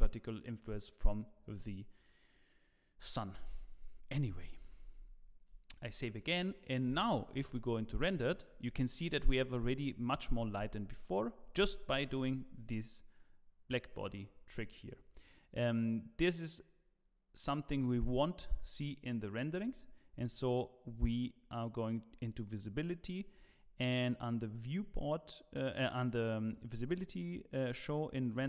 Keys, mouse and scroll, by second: 5.1 ctrl+s, 5.1-5.8 shift+scroll down 2, 6.0 shift+middle click, 6.8 z, 15.7 click, 23.3 scroll down 1, 26.5 scroll down 2, 28.3 click.